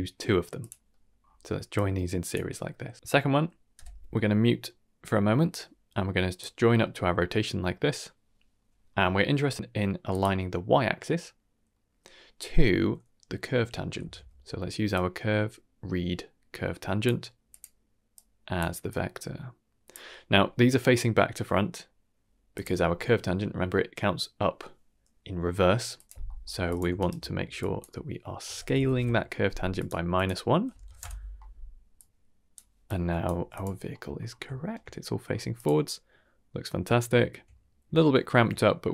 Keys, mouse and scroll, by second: 0.8 middle click, 1.2-1.7 scroll up 1, 1.7-2.3 drag, 1.7-2.3 scroll up 1, 3.7 m, 4.4 middle click, 5.4-6.3 drag, 6.6 middle click, 7.9 middle click, 8.5 middle click, 10.0 click, 11.6 middle click, 13.9 shift+a, 18.1-18.5 drag, 18.8-19.9 drag, 20.9 scroll down 1, 21.1-21.8 middle drag, 22.5 click, 25.9 click, 26.2 middle click, 26.4 g, 26.9 ctrl+right click, 27.5-29.8 drag, 30.1 click, 31.9-32.5 drag, 32.8 click, 33.3 g, 33.9 middle click, 34.2 scroll up 2, 34.5 shift+middle drag, 34.8 middle drag, 35.2 scroll up 1, 35.5 click, 35.8-36.6 middle drag, 36.9 shift+middle drag, 37.5-37.8 middle drag, 38.3 scroll down 2, 38.6 shift+middle drag.